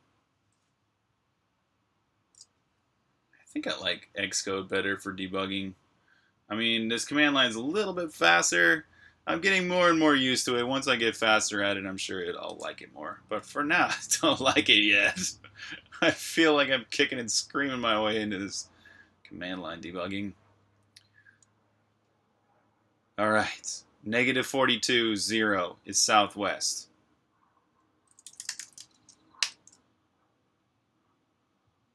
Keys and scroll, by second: 2.3 typing, 11.2 super+Tab, 27.9-29.1 typing, 29.3 Return.